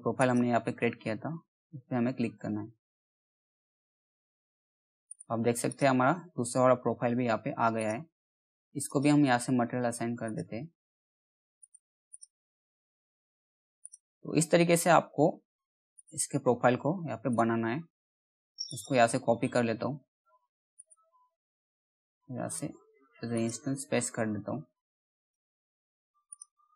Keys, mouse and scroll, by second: 0.4 scroll down 1, 1.9 alt+middle click, 4.6 right click, 5.2 click, 5.7 middle click, 6.2 scroll up 1, 6.3-7.0 scroll down 1, 7.3 click, 7.4 click, 13.8-14.4 scroll up 1, 14.4-14.8 scroll down 1, 14.8 middle click, 15.5 click, 15.8-16.1 scroll down 1, 16.8 right click, 18.2 click, 18.6-19.0 scroll down 1, 19.0 middle click, 19.0 middle click, 19.4 scroll up 1, 20.3 click, 22.0 right click, 22.9 click, 23.3 scroll down 1, 23.7 middle click, 23.7 middle click, 24.2-24.7 scroll up 1, 24.7 click, 25.8 right click, 26.5 click.